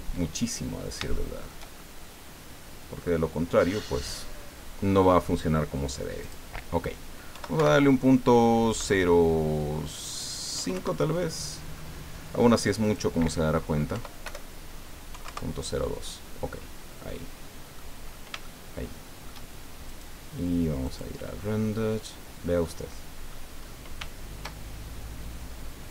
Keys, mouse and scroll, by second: 0.7 scroll up 1, 1.1 shift+middle click, 1.8-3.2 shift+middle drag, 6.2 click, 7.3 End, 7.6 BackSpace, 8.7 KP_0, 10.5 KP_5, 10.7 KP_Enter, 12.8 click, 13.9 End, 14.2 BackSpace, 15.1 KP_2, 15.2 KP_Enter, 16.7 scroll down 2, 17.0 click, 18.0 scroll up 2, 18.4-19.4 shift+drag, 19.8 click, 20.8 click, 22.1 scroll down 1, 22.6 middle click, 23.6-23.9 scroll up 1.